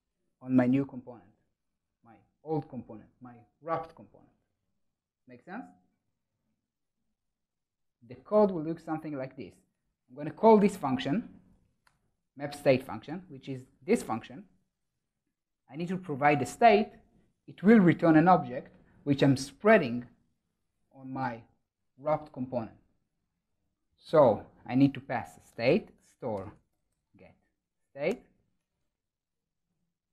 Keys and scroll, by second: 11.7 Return, 28.0 Return.